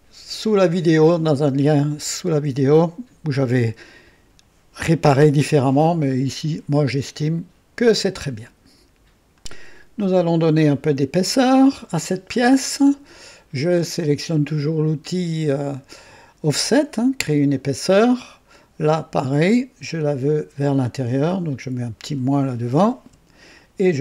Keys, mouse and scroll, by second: 11.2 click, 17.4 click, 18.5 click, 22.0 click, 23.0 KP_Subtract.